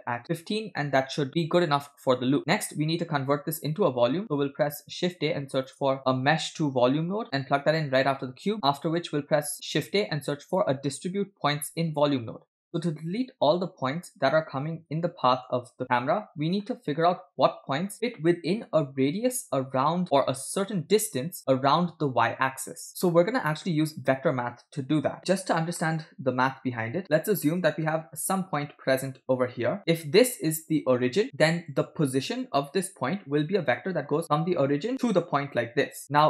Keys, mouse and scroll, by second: 1.3-2.4 middle drag, 1.3 scroll down 2, 4.2 click, 4.7 shift+a, 7.2 BackSpace, 8.5 click, 9.7 shift+a, 14.3-15.5 middle drag, 16.7-18.8 middle drag, 16.7 scroll up 1, 23.3-23.7 scroll down 1, 23.8 scroll down 1, 25.8-26.9 shift+middle drag, 27.0 e, 28.9 click, 30.8 click, 34.0 click, 34.2 click, 35.1 click.